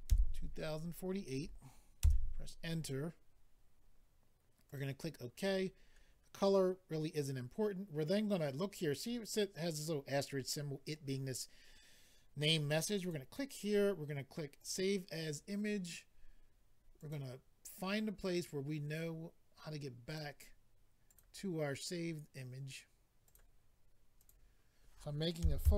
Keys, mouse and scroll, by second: 1.4 typing, 2.0 Return, 4.6 click, 4.8 click, 5.5-6.1 scroll down 6, 13.0 click, 13.1 click, 14.6 click, 17.0 click, 17.1 click, 20.0 click, 20.1 click, 21.0 click, 21.1 click, 23.2 click, 23.3 click, 24.2 click, 24.3 click, 25.4-25.7 typing.